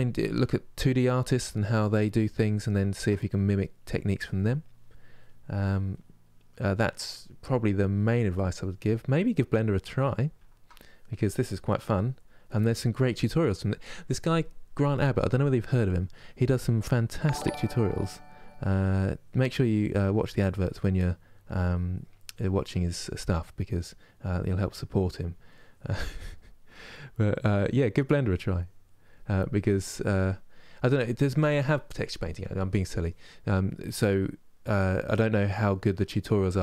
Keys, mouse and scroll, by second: 0.5 middle click, 1.0 click, 1.7-3.5 middle drag, 3.5-4.5 drag, 4.5 middle click, 5.0 click, 5.6-7.7 middle drag, 7.7-8.9 drag, 8.9-10.6 middle drag, 10.6 click, 11.2 middle click, 11.7 click, 12.2-16.2 middle drag, 16.2 click, 17.0 middle click, 17.5 click, 18.2 middle click, 18.6 click, 19.4 middle click, 19.8-20.8 drag, 20.8 middle click, 21.2 click, 21.9 middle click, 22.3-23.4 drag, 23.4 middle click, 24.0 click, 24.4 middle click, 25.2 click, 26.1 middle click, 26.4-27.5 drag, 27.5 middle click, 27.9-29.1 drag, 29.1 middle click, 29.6 click, 30.3-35.1 middle drag, 35.1-36.6 drag.